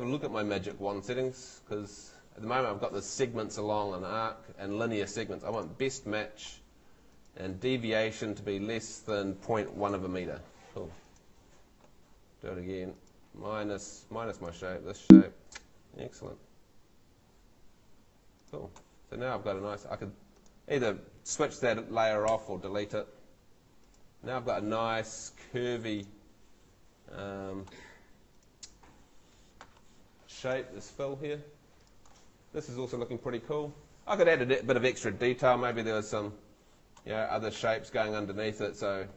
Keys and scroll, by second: 9.7 ., 9.9 |, 14.4 space, 22.3 BackSpace, 35.9 Escape.